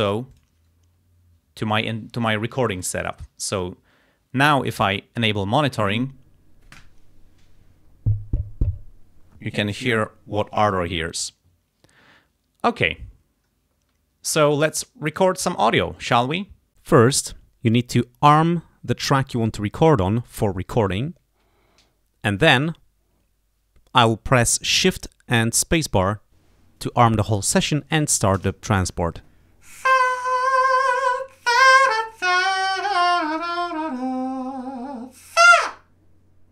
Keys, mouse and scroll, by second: 0.4 click, 3.6 click, 5.9 click, 11.2 click, 15.6-16.6 drag, 23.4 click, 28.5 shift+space.